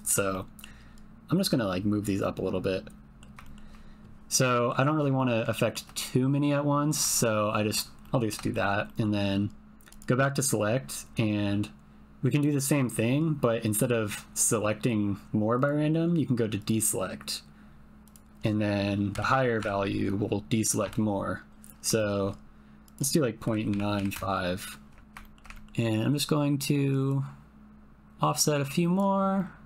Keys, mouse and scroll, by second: 1.6-3.2 drag, 3.4 shift+middle click, 4.4 middle click, 4.8 shift+middle click, 5.1 ctrl+middle click, 5.6 shift+middle click, 8.1 shift+middle click, 8.5 ctrl+middle click, 8.9 middle click, 10.8-12.4 drag, 15.5 click, 18.1-21.2 drag, 22.0 shift+middle click, 22.9-24.7 drag, 25.0 ctrl+l, 25.2 shift+click, 25.5 ctrl+click, 29.3 click.